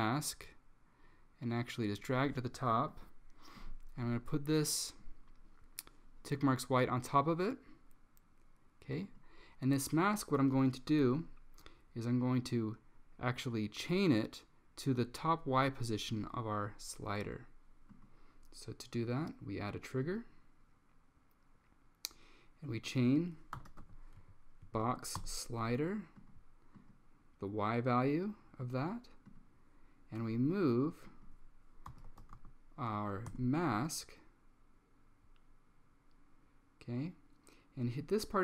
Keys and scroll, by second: 23.4-24.4 typing, 24.7 Down, 24.9 Down, 25.2 Return, 31.7-32.9 typing, 33.1 Down, 33.4 Return.